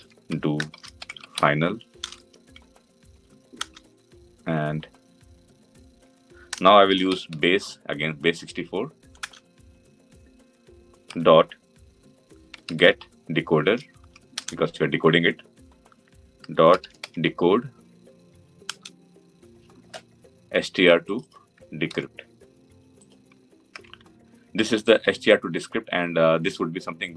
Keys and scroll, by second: 3.5 Return, 9.1 Return, 14.3 Return, 18.6 Return, 21.7 Return, 22.6 ctrl+c.